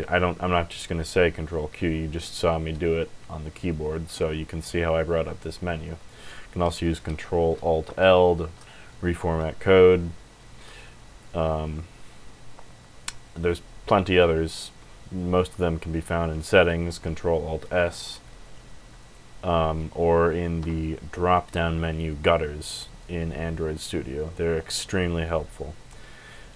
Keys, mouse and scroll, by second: 5.9 click, 7.9 ctrl+alt+l, 9.8 Escape, 10.6 click, 17.5 ctrl+alt+s, 18.9 click, 20.5 Escape, 21.3 click.